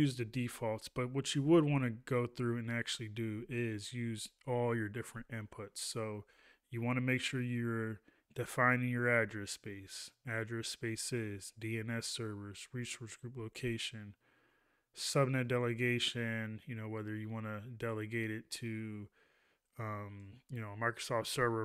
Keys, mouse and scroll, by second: 0.4 ctrl+a.